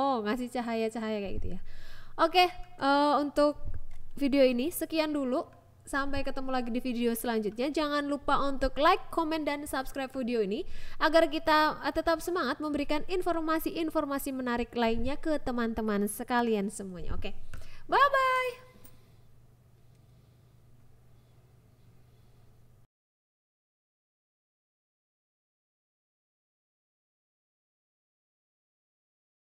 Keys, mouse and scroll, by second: 0.2 KP_0, 0.7 click, 2.5 click, 3.6 click, 4.2 click, 4.7 click, 5.0 click, 5.3 shift+a, 6.6 click, 8.7 click, 9.5 click, 10.2 click, 11.2 click, 11.9 click, 12.5 click, 13.7 click, 14.6 click, 15.1 click, 15.8-16.9 drag, 17.8 click, 19.1 click, 20.1 click, 21.1 click, 21.9 click, 23.4 click, 24.3 ctrl+s, 24.7 click, 25.7 click, 26.6 click, 27.5 click, 28.4 click, 29.1 click.